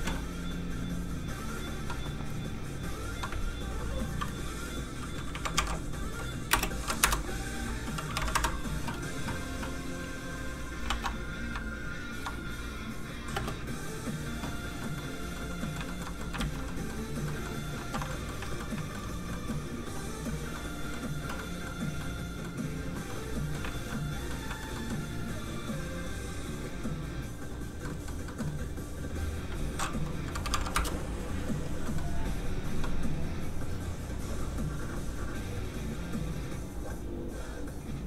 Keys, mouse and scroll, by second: 5.3 ctrl+KP_1, 5.6 KP_5, 6.5 BackSpace, 6.8 KP_6, 7.0 Return, 7.7 click, 8.1 KP_6, 8.3 KP_6, 8.4 Return, 10.6 click, 10.9 shift+d, 11.9 shift+click, 13.0 click, 13.1 click, 13.3 space, 15.0 middle click, 15.9 shift+middle click, 16.1 scroll up 1, 16.2 middle click, 16.4 alt+shift+z, 16.7 middle click, 16.7 scroll down 1, 18.1 alt+middle click, 18.2 middle click, 18.4 alt+shift+z, 18.7 shift+middle click, 19.0 scroll up 1, 19.3 middle click, 23.7 alt+shift+z, 24.0 middle click, 24.5 shift+middle click, 24.7 middle click, 24.8 middle click, 26.0 click, 27.8 middle click, 28.8 click, 30.4 KP_2, 30.5 KP_5, 30.9 Return, 31.8 middle click, 33.9 click.